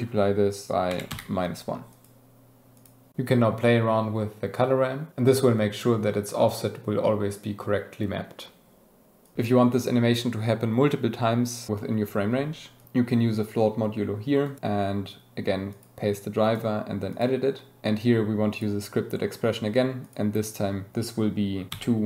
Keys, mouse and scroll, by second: 2.7 click, 3.6-12.8 drag, 14.4-15.8 drag, 16.4-22.0 drag.